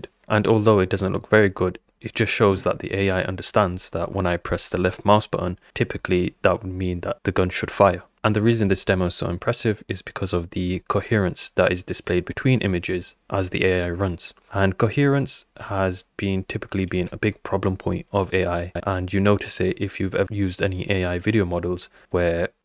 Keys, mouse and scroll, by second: 2.3 click, 7.3 click, 8.2 Right, 9.7 Right, 18.5 Up.